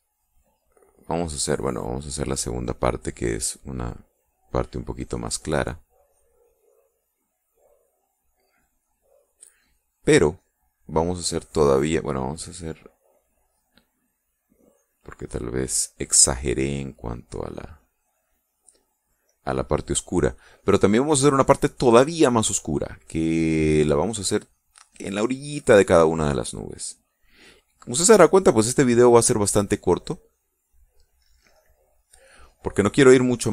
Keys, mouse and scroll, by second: 1.7-2.9 drag, 3.7-7.8 drag, 8.3-11.5 drag, 12.8-14.1 drag, 14.9-20.4 drag, 20.8-29.3 drag, 29.9-32.7 drag.